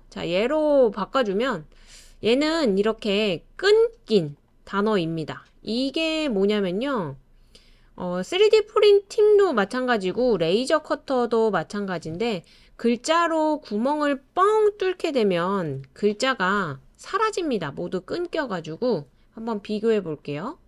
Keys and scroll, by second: 10.7-11.5 typing, 15.4 super+c, 15.7 super+v.